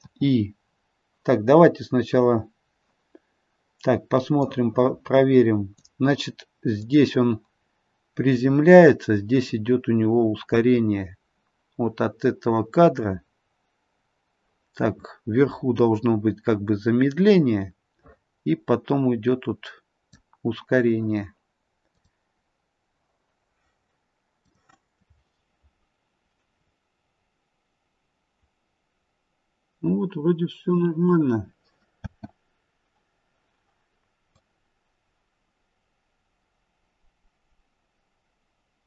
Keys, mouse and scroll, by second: 4.3 click, 6.9 click, 21.8 click, 24.4 click, 26.5-27.3 scroll down 2, 27.3-28.5 scroll up 1, 28.5-29.6 scroll up 1, 32.0 space, 34.3 click.